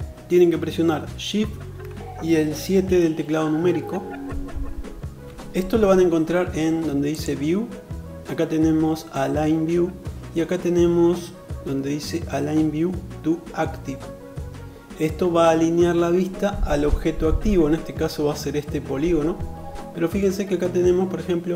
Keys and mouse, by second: 7.0-21.5 drag.